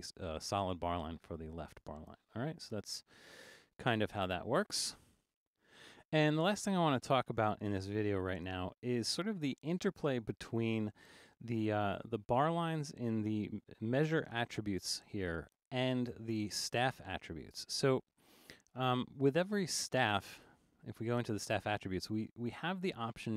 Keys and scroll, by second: 7.9 super+-, 8.6 super+=, 9.3 super+=.